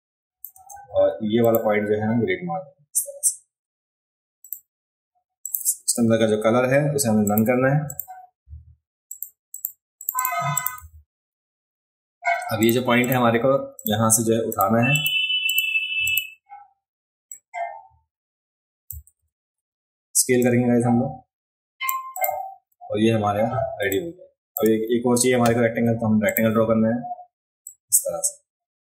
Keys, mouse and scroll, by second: 1.4 click, 4.4 click, 5.4 click, 7.2 click, 7.8 click, 8.4 v, 9.1 click, 9.5 click, 10.0 click, 10.1 click, 10.5 click, 12.6 click, 13.0 click, 13.8 click, 14.5 click, 14.9 click, 15.4 click, 16.1 click, 17.3-18.9 drag, 19.2 ctrl+z, 20.4-21.9 drag, 22.2 click, 22.8 alt+scroll up 2, 23.2-23.6 alt+scroll down 2, 23.8 space, 23.9 click, 26.3 click, 27.6-28.8 drag.